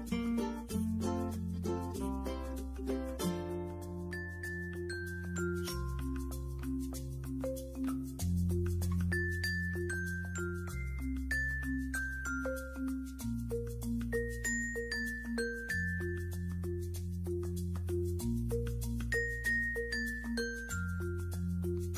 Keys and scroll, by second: 4.4 alt+space, 13.3 ctrl+z.